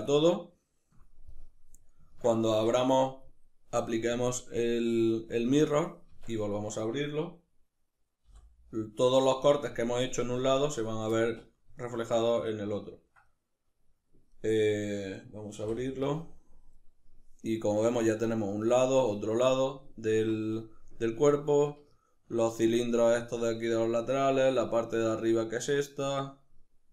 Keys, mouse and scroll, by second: 2.5 Tab, 3.8 click, 4.9-10.8 drag, 5.7 Tab, 6.2 a, 10.8-26.9 middle drag, 15.3 u.